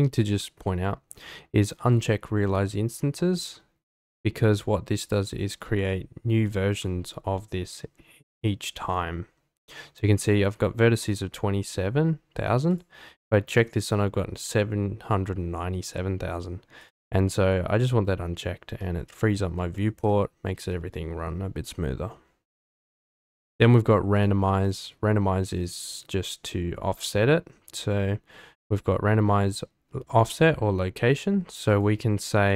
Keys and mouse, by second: 1.9 click, 4.1 click, 12.8-16.9 drag, 18.8-19.3 middle drag, 19.7 shift+middle drag, 20.1 middle click, 20.3 middle click, 20.7-21.0 shift+middle drag, 24.2-24.8 drag, 31.7-32.5 drag.